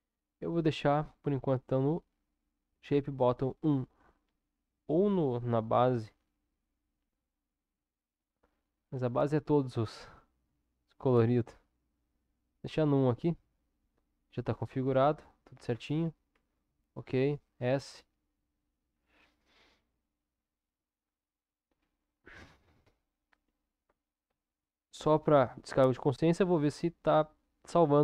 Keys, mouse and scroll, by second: 1.5 click, 4.8-10.4 drag, 10.4 Tab, 11.4 Tab, 12.4 click, 13.7 click, 14.7 Tab, 16.4 ctrl+s, 24.3 ctrl+s.